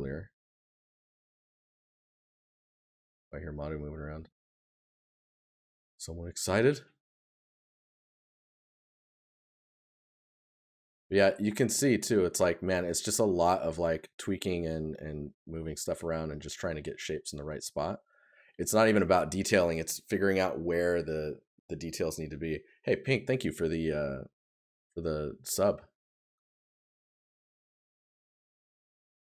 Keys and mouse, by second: 3.0 right click, 6.8 right click, 11.2 right click, 16.4 right click, 25.4 right click.